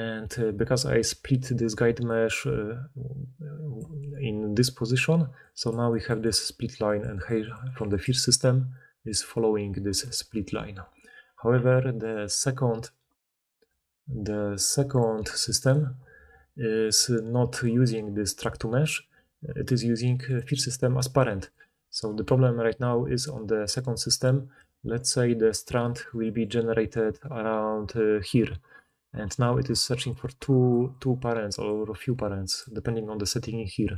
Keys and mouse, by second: 3.8-6.2 typing, 7.5 d, 7.5-8.6 d, 10.0 d, 12.0 d, 12.0-15.6 drag, 16.9-20.2 middle drag, 20.2 click, 20.3-21.4 middle drag, 21.4 click, 21.5-23.7 middle drag, 23.7 click, 24.2-27.6 middle drag, 26.5-31.8 typing, 27.6-32.6 drag, 30.4-32.6 middle drag, 30.4-33.9 right drag.